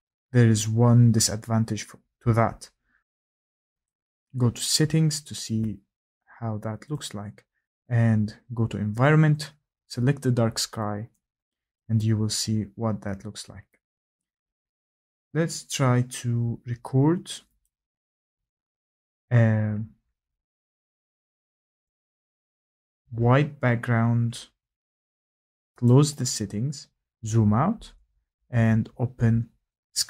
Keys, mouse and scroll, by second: 2.3-2.9 scroll, 3.8 click, 5.4 click, 6.9 click, 11.7 click, 14.8-15.5 scroll, 15.5 scroll, 17.6 click, 19.0 scroll, 19.2-19.7 scroll down 4, 19.7-21.8 scroll, 21.8 click, 22.8-23.2 scroll, 23.8-25.1 scroll, 25.5 click, 25.8 click, 26.6-27.7 scroll.